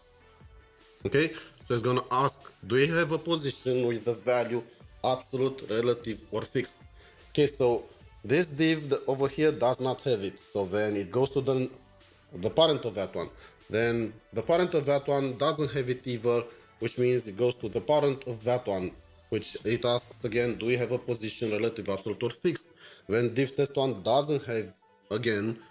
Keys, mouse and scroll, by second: 0.4 double click, 18.7 double click.